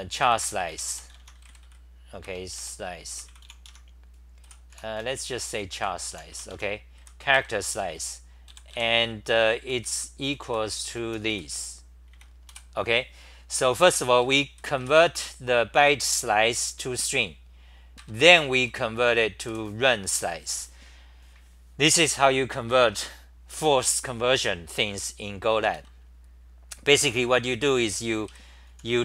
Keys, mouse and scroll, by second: 0.0-1.4 typing, 3.7 Home, 3.7-12.1 typing, 7.3 ctrl+g, 13.7-15.3 typing, 18.0 ctrl+g, 18.4-19.5 typing, 25.7 ctrl+g, 27.0 t, 28.4-29.0 typing.